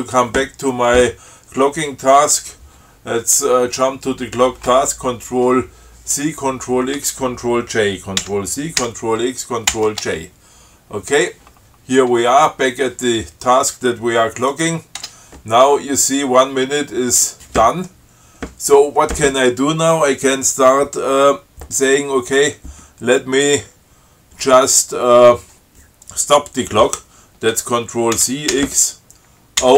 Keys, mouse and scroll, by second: 8.5 ctrl+c, 9.1 ctrl+x, 10.0 ctrl+j, 12.0-12.8 scroll up 4, 14.8 click, 15.2 Tab, 28.4 ctrl+c, 28.8 ctrl+x.